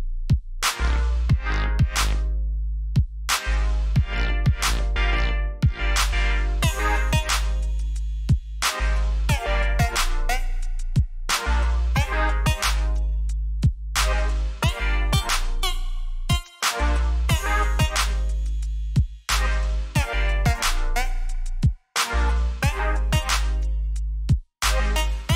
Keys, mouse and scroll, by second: 7.6 alt+scroll up 2, 8.0 scroll down 1, 9.8 click, 13.7 click, 19.3 click, 24.1 click.